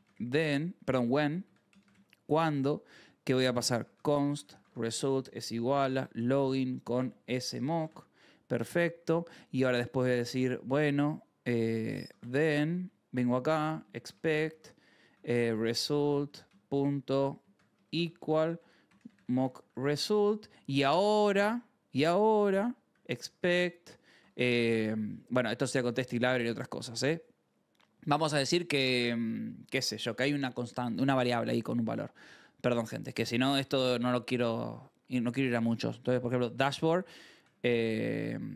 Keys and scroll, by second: 0.0-8.9 typing, 8.5 Right, 9.2 Return, 11.1-24.2 typing, 22.0 Return, 36.1-38.5 typing.